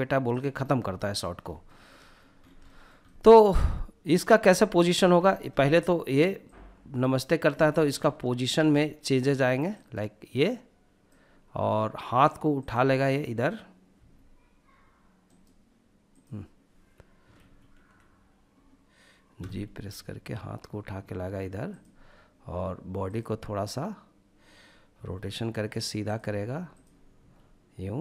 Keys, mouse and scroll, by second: 0.6 shift+middle click, 1.1-1.7 scroll up 3, 1.6 shift+middle click, 2.0 shift+middle drag, 3.1 click, 3.5 shift+middle click, 3.9 scroll down 1, 4.2 shift+middle click, 4.5-5.4 shift+middle drag, 5.4 click, 7.5 ctrl+z, 8.7 click, 11.5 click, 13.0 h, 14.2 right click, 15.1 right click, 16.5 ctrl+z, 18.4 g, 20.7 drag, 22.0 click, 23.9 r, 25.0 click, 25.7 drag, 26.2 r, 27.0-28.0 drag.